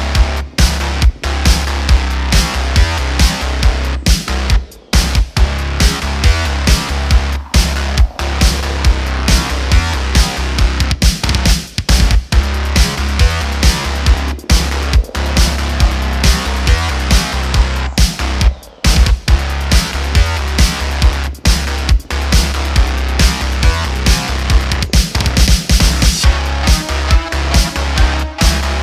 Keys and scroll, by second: 12.6 q, 17.7 Tab, 18.3 super+r, 21.2 3, 21.7 e, 22.7 t, 23.2 Tab.